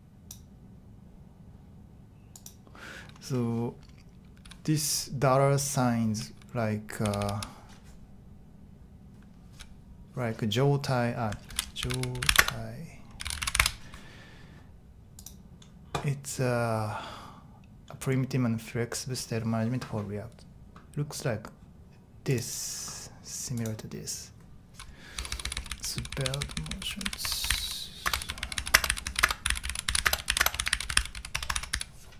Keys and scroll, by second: 7.0-7.3 typing, 11.5 super+t, 11.5-14.0 typing, 23.6 typing, 24.9-32.1 typing.